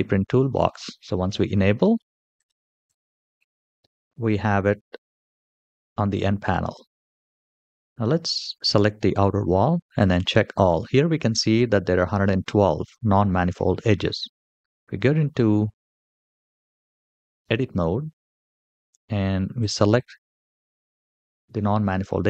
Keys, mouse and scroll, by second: 9.7 click, 14.2 Tab, 19.3 click, 20.4-21.2 scroll up 4.